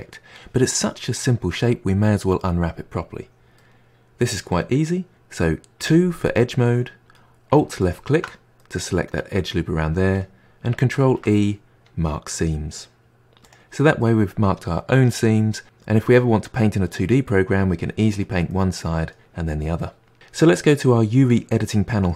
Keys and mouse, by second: 3.5-5.8 middle drag, 5.8 2, 7.8 alt+click, 8.6-11.0 middle drag, 11.0 ctrl+e, 14.0-15.6 middle drag, 18.5-20.1 middle drag, 20.1 click.